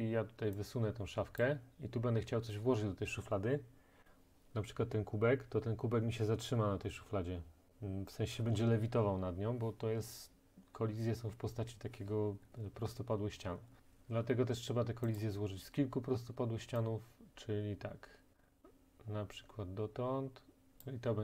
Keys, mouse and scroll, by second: 1.4-6.4 drag, 13.8 ctrl+z, 15.2 click, 20.8 click.